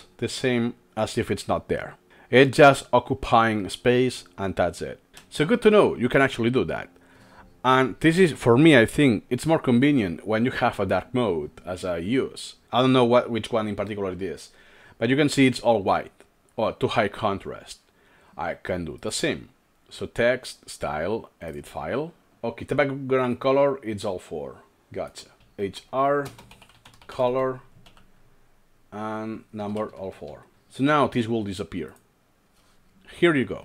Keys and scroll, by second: 5.1 Escape, 25.5 typing, 26.6-28.3 typing, 29.7 ctrl+alt+3, 29.8-31.1 typing, 32.1 typing.